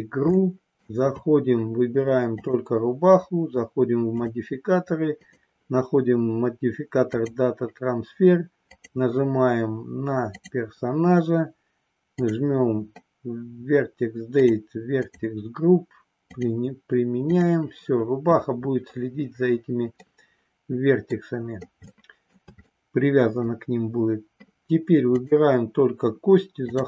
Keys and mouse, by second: 0.4 shift+middle click, 2.4 click, 5.3-7.3 drag, 8.7 click, 12.1 click, 14.3 click, 15.0 click, 16.3-17.5 drag, 19.9-21.2 middle drag, 21.9 shift+middle click, 22.8 middle click, 26.6 click.